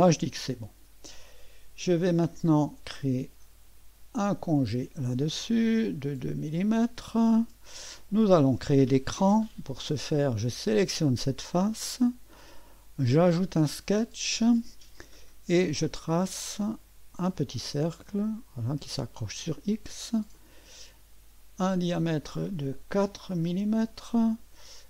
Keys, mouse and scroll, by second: 0.0 click, 2.7 click, 4.1 click, 7.1 click, 10.6 click, 13.1 click, 15.6 click, 17.3 click, 18.4 click, 19.2 right click, 20.3 click, 21.9 click, 22.9-23.6 typing.